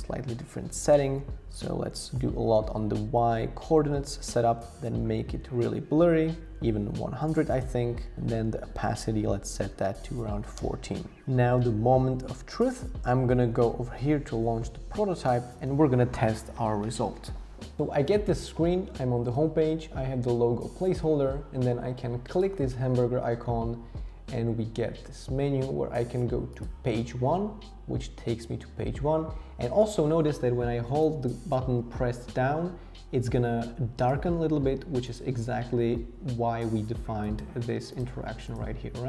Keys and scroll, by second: 1.9 shift+Down, 3.8 shift+Up, 3.9 shift+Up, 4.1 shift+Up, 7.7 shift+Down, 8.1 shift+Up, 9.3 Down, 9.8 Up, 10.1 Down, 10.6 Return.